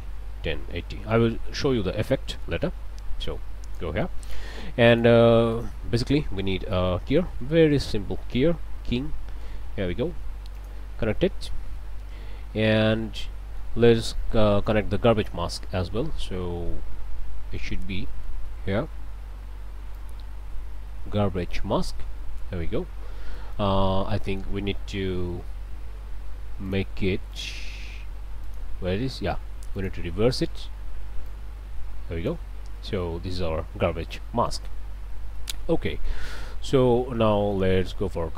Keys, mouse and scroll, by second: 0.0-0.8 typing, 0.0 Tab, 1.1 Return, 1.9 scroll down 1, 2.3 click, 3.2 click, 4.0 click, 4.9 shift+click, 5.2 shift+a, 5.5 shift+click, 6.7 k, 6.9 e, 7.1 y, 7.8 Down, 9.4 Return, 10.6 click, 11.4 scroll down 2, 11.8-13.8 drag, 13.8 scroll down 2, 14.3 click, 16.3-16.8 scroll up 2, 16.8 middle click, 17.7 scroll down 2, 18.1 middle click, 19.9-22.1 drag, 22.5 middle click, 23.4 click, 24.1 click, 25.2 n, 26.7 click, 27.3 click, 28.4 click, 29.8 click, 30.3 n, 31.3-32.5 drag, 32.8 click, 34.3 click, 35.3 scroll up 1, 35.4 click, 36.5 scroll up 1, 36.8 click.